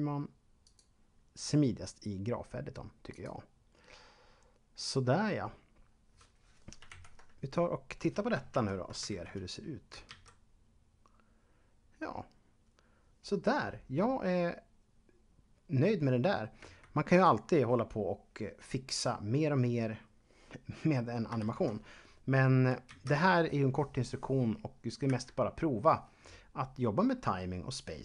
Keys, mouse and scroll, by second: 0.5 click, 3.0 click, 6.9 ctrl+Up, 8.5 ctrl+Up, 9.0 shift+Left, 16.6 Escape, 21.4 shift+Left, 22.9 alt+a, 25.1 Escape.